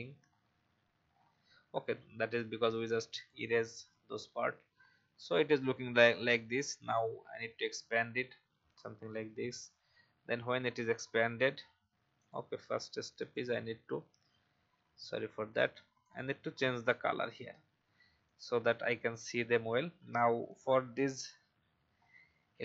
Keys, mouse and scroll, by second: 0.3 alt+scroll up 1, 1.1-1.5 alt+scroll down 1, 5.5 alt+scroll up 1, 6.8 click, 21.9 alt+scroll up 1.